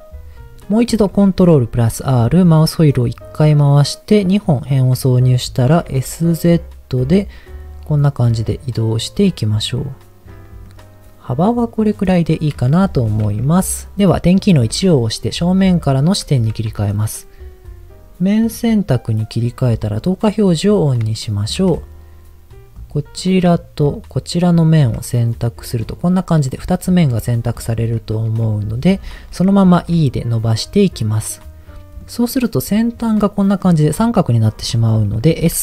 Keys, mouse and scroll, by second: 1.1 ctrl+r, 4.2 right click, 5.0 middle click, 5.6 s, 5.8 z, 10.3 click, 10.6-12.4 middle drag, 14.8 KP_1, 15.7 shift+middle click, 18.5 click, 20.1 click, 20.6-21.0 scroll up 2, 21.1 shift+middle click, 21.6 scroll up 2, 22.7 click, 24.4 shift+click, 25.1 middle click, 28.2 KP_1, 29.3-29.8 scroll down 2, 29.8 e, 31.0 click, 31.8 middle click, 32.3 middle click, 33.0 click, 33.4 middle click, 35.3 s.